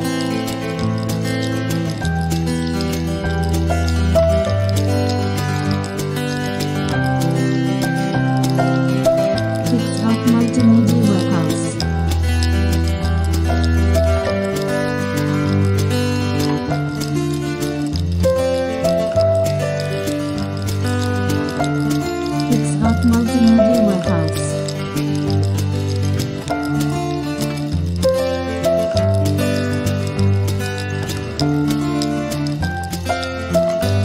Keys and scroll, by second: 1.6 super+u, 5.1 super+u, 5.6 super+u, 15.7 super+BackSpace, 16.3 alt+BackSpace, 16.7 super+d, 24.2 alt+BackSpace, 24.7 super+d.